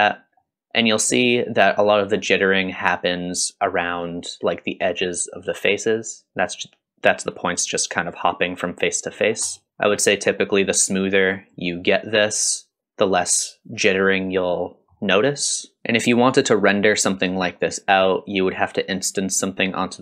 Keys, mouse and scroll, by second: 0.2 scroll up 1, 1.6-2.0 scroll up 2, 2.0 middle click, 9.2-9.5 scroll down 2, 9.5 middle click, 9.7 scroll up 1, 9.8 middle drag, 11.3 click, 12.5 click, 14.6-14.9 middle drag, 15.8 middle click, 15.8-16.7 scroll down 2.